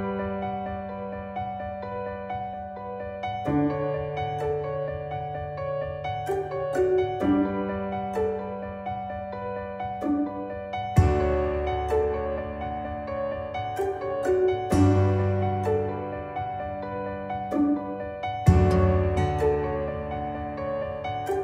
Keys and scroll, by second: 1.1 b, 8.8 ctrl+z, 10.6 ctrl+z, 16.1 Caps_Lock, 16.2-19.7 typing, 18.5 Return, 21.2 e.